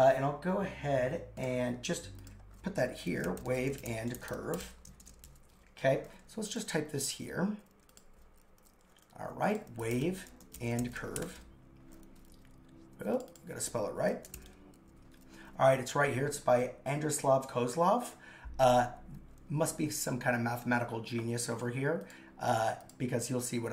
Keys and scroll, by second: 3.1 shift+w, 4.2 shift+c, 4.9 shift+;, 5.0 shift+space, 5.3 super+v.